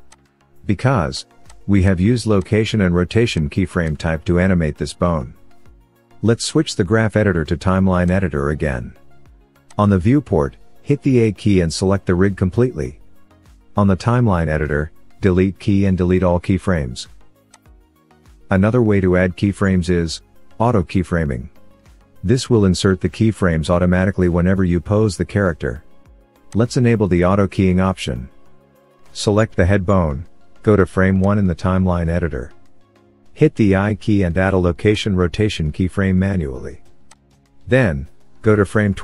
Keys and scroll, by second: 15.8 Delete.